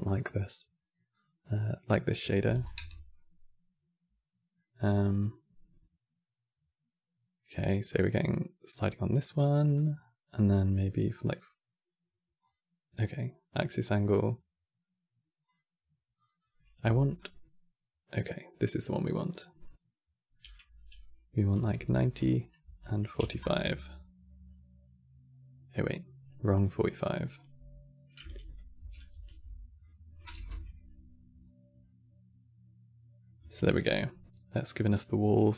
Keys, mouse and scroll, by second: 4.3-7.3 middle drag, 7.8-8.2 scroll up 2, 9.4-15.1 drag, 15.2 click, 16.1-19.1 drag, 20.2-21.9 drag, 21.9 Tab, 24.8-25.3 scroll up 3, 25.5 scroll down 1, 26.6 click, 28.5 ctrl+c, 28.8 ctrl+v, 29.5-31.1 drag, 31.1 scroll down 2, 31.5-35.5 middle drag.